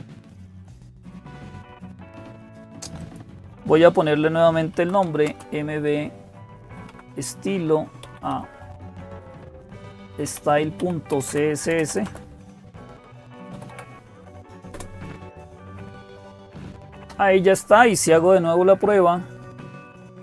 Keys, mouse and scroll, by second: 0.0-20.2 typing, 0.0 click, 2.1 click, 20.0 click.